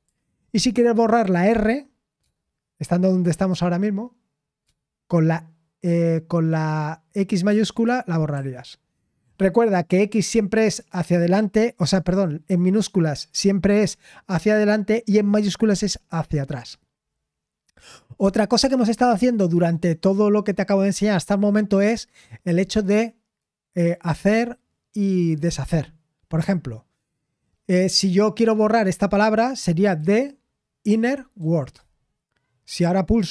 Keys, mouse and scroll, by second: 9.5 typing.